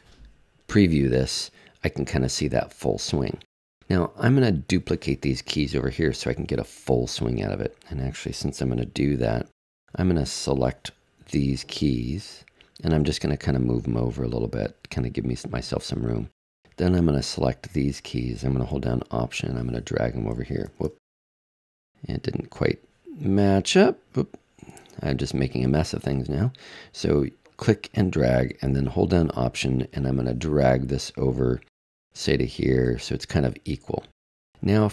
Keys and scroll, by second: 20.7 super+z, 24.8 super+z.